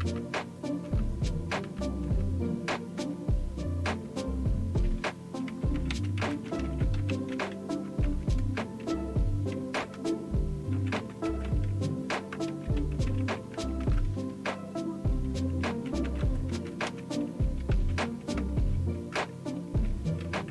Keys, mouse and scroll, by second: 0.0 Down, 0.8 Down, 1.6 Down, 2.0 Down, 3.0 Return, 4.0 Return, 5.5-7.8 typing, 8.4 Return, 9.3-14.0 typing, 14.3 Return, 15.4-19.1 typing.